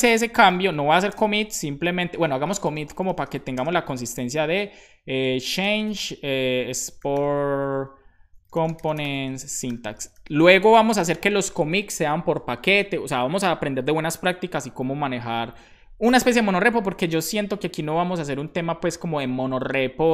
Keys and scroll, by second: 0.0-3.5 typing, 5.3-6.5 typing, 8.1-9.7 typing, 10.8 space.